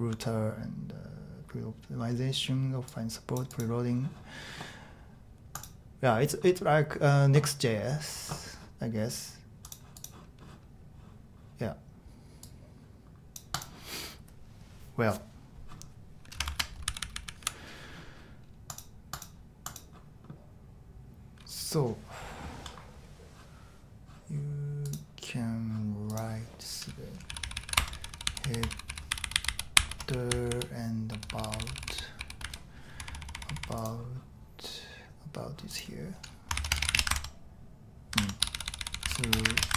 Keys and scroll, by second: 16.5 shift+Tab, 16.8-17.4 typing, 27.0-33.6 typing, 29.1 ctrl+u, 29.2 ctrl+u, 29.3 ctrl+u, 36.6 ⟲, 36.8 w, 36.9 Return, 38.1-39.7 typing.